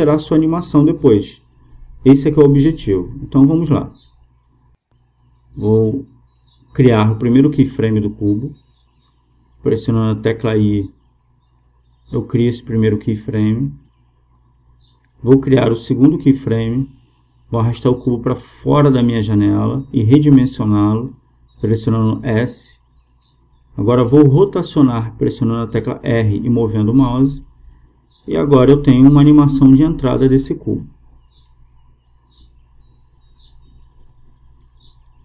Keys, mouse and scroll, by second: 7.2 i, 14.8-16.5 drag, 16.8-18.7 drag, 19.5 s, 23.1 r, 28.4-30.2 drag, 34.4-35.2 drag.